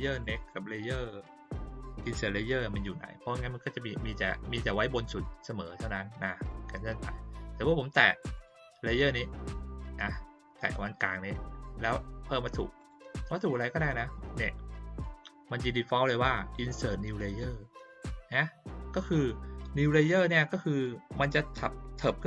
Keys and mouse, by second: 0.2 click, 0.4 click, 0.8 click, 6.4 click, 8.3 click, 12.7 click.